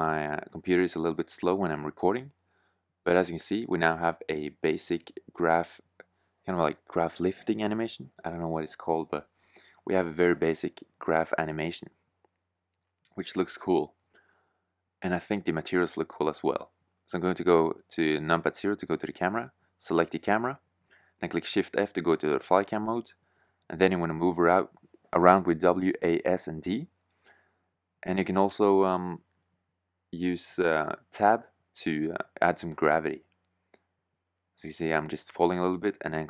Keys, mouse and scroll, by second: 12.3-13.3 drag, 13.3 shift+z, 16.0 KP_0, 20.5 shift+f, 23.3 shift+z, 24.7 shift+f.